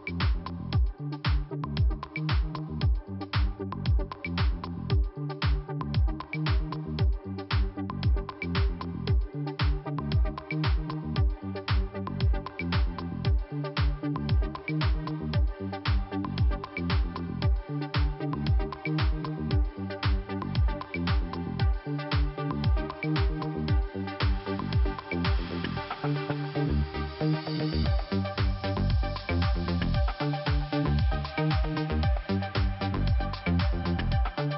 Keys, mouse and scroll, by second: 0.5 click, 2.3 scroll down 2, 3.5 scroll up 1, 3.9 click, 4.6 scroll up 2, 5.3 click, 5.5 click, 6.2 click, 7.2-8.6 scroll down 2, 10.5 click, 11.0 click, 11.6 double click, 13.0-13.7 scroll down 1, 16.6-17.6 scroll up 1, 17.9 click, 18.7 middle click, 22.4-23.2 scroll up 2, 24.3 click, 25.6 click, 25.9 middle click, 27.7 click, 31.8-32.9 scroll down 2, 33.4 scroll up 2, 34.3 middle click.